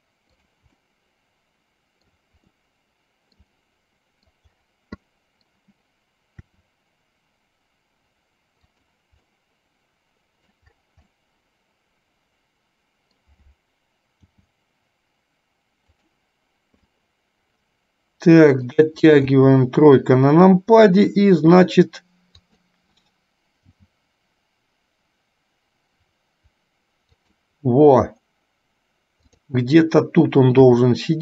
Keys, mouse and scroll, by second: 1.0-2.4 middle drag, 2.6-4.5 middle drag, 5.1 middle click, 6.6 r, 9.4-10.6 middle drag, 11.2-13.5 middle drag, 14.2 g, 17.1-19.1 middle drag, 19.5 KP_3, 22.5 click, 23.9 g, 29.5 click, 30.7 r.